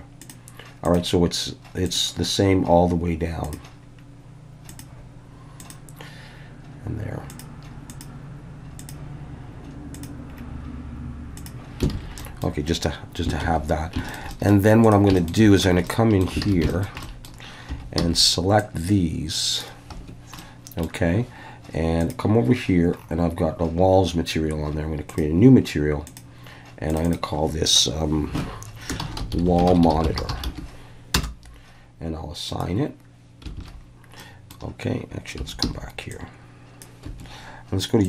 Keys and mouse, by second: 0.3 click, 0.8-2.0 drag, 3.4 drag, 4.7 click, 5.7-7.4 drag, 8.0-8.9 drag, 9.9 click, 11.4 click, 11.9 alt+a, 12.2 middle click, 13.4 ctrl+s, 14.1 shift+middle click, 14.3 middle click, 14.9 drag, 15.2 shift+middle click, 15.7 Tab, 15.9 middle click, 16.6 alt+a, 16.7 shift+middle click, 17.0 middle click, 17.7 3, 18.0 c, 19.9 Escape, 20.4 middle click, 22.1 click, 26.2-27.0 drag, 27.1-31.8 drag, 29.4 l, 32.5 click, 33.6 alt+a, 34.2 middle click, 35.4 3, 35.6 c, 37.0 Escape.